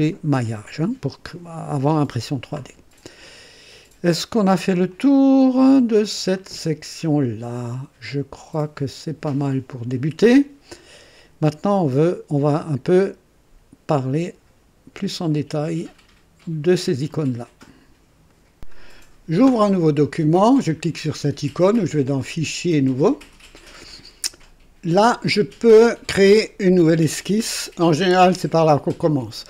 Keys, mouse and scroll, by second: 4.9-6.1 drag, 6.4-7.1 right drag, 8.7 scroll down 2, 18.3 right click, 18.5 click, 22.1 click, 22.9 click.